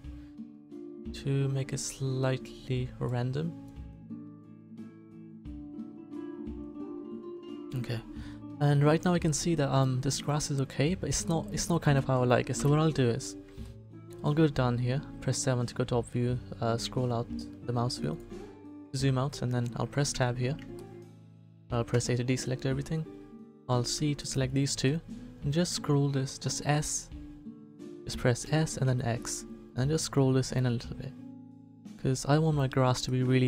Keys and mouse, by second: 7.9 middle click, 10.5 middle click, 12.5 KP_7, 13.6-15.8 middle drag, 20.1 Tab, 21.9 a, 23.4 c, 24.6-26.6 drag, 25.5 s, 28.4 s.